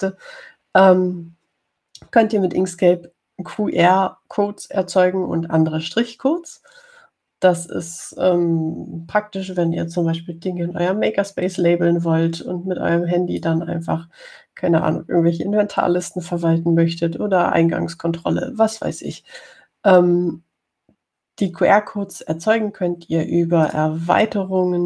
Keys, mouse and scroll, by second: 12.7-14.9 drag.